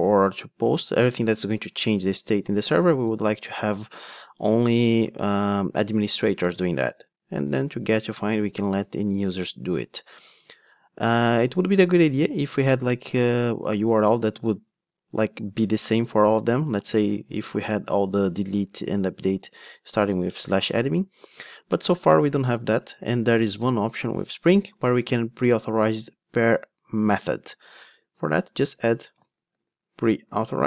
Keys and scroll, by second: 30.4 Return.